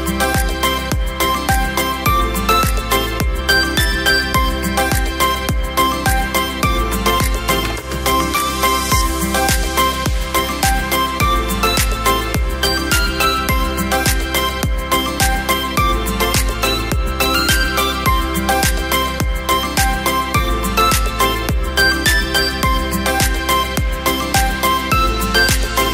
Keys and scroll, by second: 20.0 Return.